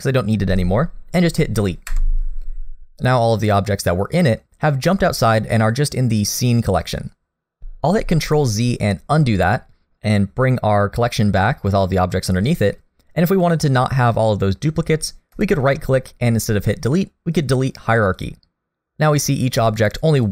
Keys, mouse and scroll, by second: 1.9 Delete, 7.6 ctrl+z, 7.6 click, 15.4 right click, 19.8 click, 20.2 click.